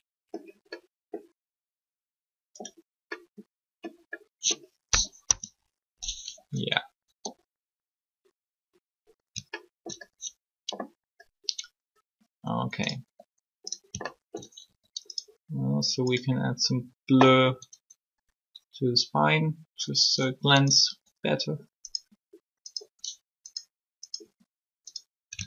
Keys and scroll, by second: 5.2 3, 13.0 r, 14.6 alt+shift+r, 20.8 r.